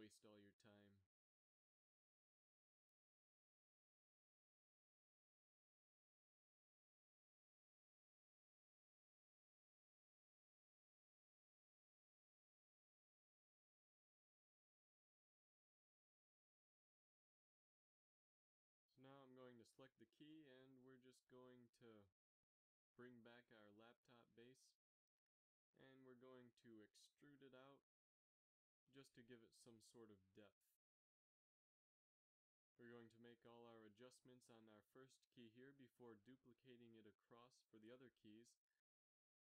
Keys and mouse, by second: 0.4 g, 5.3 a, 5.7 z, 9.3-12.0 drag, 12.1 Tab, 12.7 space, 13.8 Tab, 14.4 middle click, 15.5 a, 18.0 KP_3, 18.3 z, 22.2 KP_Divide, 23.3 KP_3, 24.2 z, 26.7 g, 30.2 e, 33.6 z, 35.7 a, 35.9 a, 36.8 ctrl+n, 37.2 a, 37.5-38.5 middle drag.